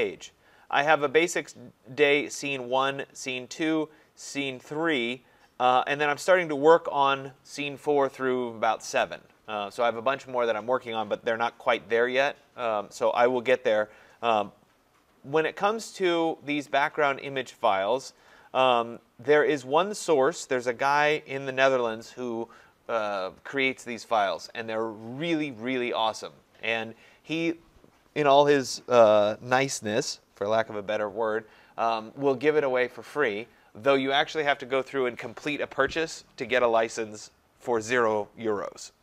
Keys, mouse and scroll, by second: 0.3 scroll down 4, 0.4 scroll, 0.6-1.6 scroll down 1, 2.8 scroll down 2, 3.5 scroll down 3, 4.9-5.5 scroll down 5, 5.5 scroll, 11.1-13.3 scroll, 13.3 scroll, 15.1 scroll down 3, 16.5-16.8 scroll up 5, 16.8-18.5 scroll.